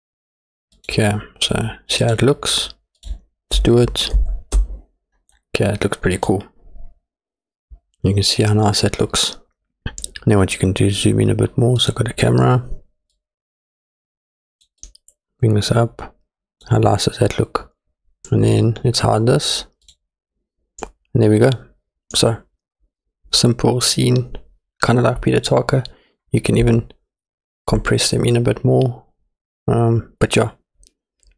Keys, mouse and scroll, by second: 2.1 click, 6.1 click, 11.8 click, 13.1-14.7 drag, 14.9-16.8 drag, 19.9 click.